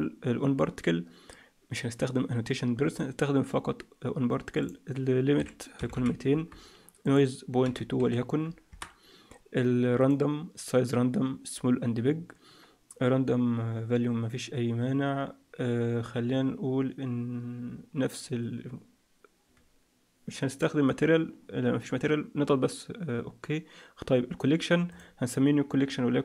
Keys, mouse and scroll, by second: 5.9 0.